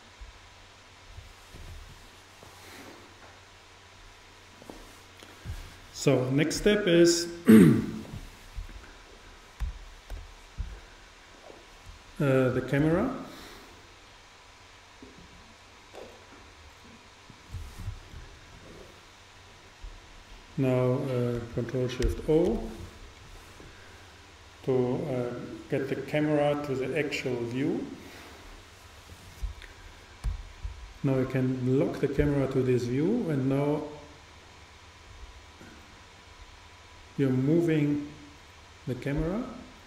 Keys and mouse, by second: 9.6 n, 10.2 t, 12.8 shift+a, 22.1 ctrl+alt+KP_0, 30.3 n, 31.8-33.6 drag.